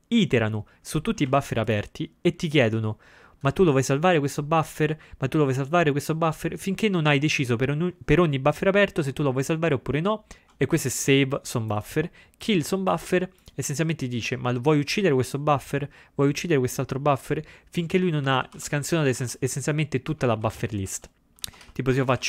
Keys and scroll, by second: 18.3 ctrl+x, 18.6 ctrl+b.